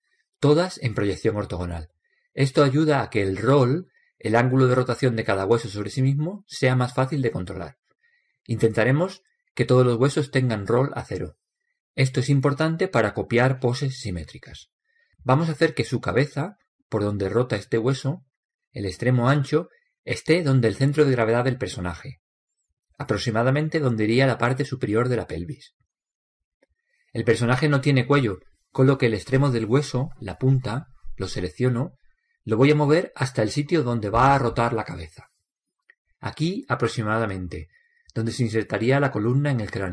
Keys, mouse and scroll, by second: 20.6-22.4 right drag, 21.6 click, 23.4 click, 23.5-25.5 right drag, 25.0 click, 29.6-31.5 right drag, 30.5 click.